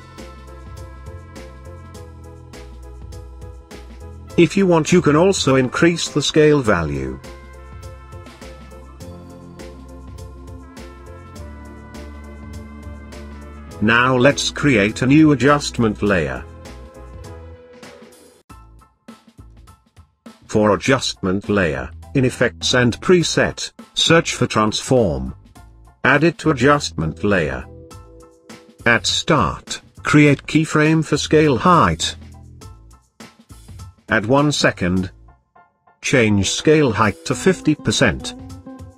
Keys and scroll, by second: 4.2 s.